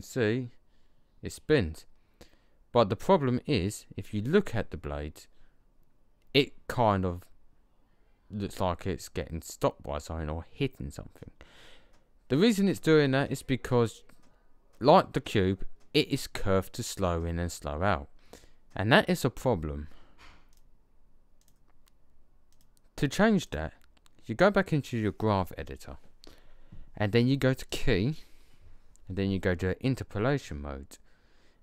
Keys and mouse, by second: 20.4-22.1 drag, 24.1 click, 27.6 click.